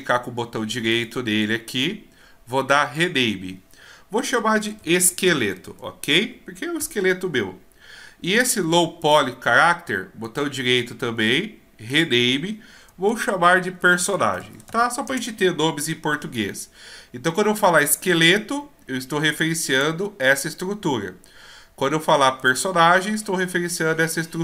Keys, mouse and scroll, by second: 0.9 right click, 9.0 click, 10.2 right click, 18.2 right click, 19.8 click, 22.4 right click.